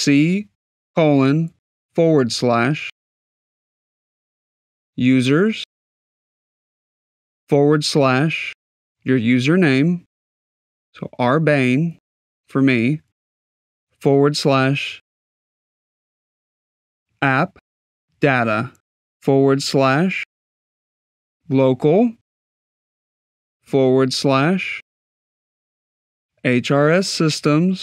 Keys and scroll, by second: 1.2 shift+;, 2.7 \, 4.3-5.2 typing, 6.8 \, 8.0 r, 10.6 b, 11.0 n, 12.9 \, 15.1 shift+a, 16.1 p, 16.8 shift+d, 17.5 a, 19.0 \, 20.0-22.4 typing, 24.9 shift+h, 25.6 shift+r, 27.3-27.8 typing.